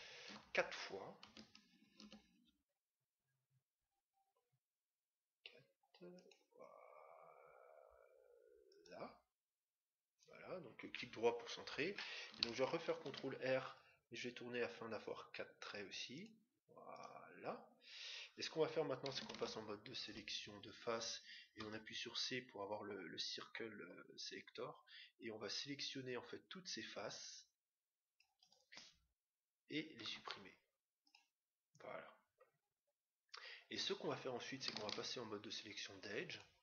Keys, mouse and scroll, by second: 1.8 ctrl+r, 9.1-10.6 right drag, 12.8 ctrl+r, 18.0 middle click, 18.6-19.3 scroll up 1, 19.3 ctrl+Tab, 19.3-19.9 scroll up 1, 19.9-20.5 scroll down 1, 21.5 c, 30.0 x, 32.7-33.7 middle drag, 33.7-34.5 scroll up 1, 34.5 scroll up 1, 34.9 ctrl+Tab.